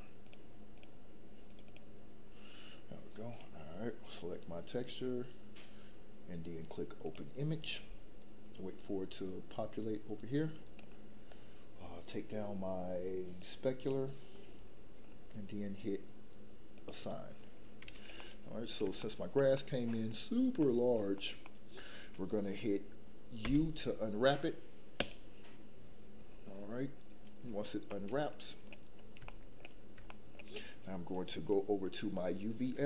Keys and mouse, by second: 13.5 click, 16.9 click, 18.2 middle click, 19.0 shift+middle click, 19.5 middle click, 20.6 middle click, 21.4 middle click, 23.4 u, 27.9 middle click, 29.2 shift+middle click, 30.0 shift+middle click.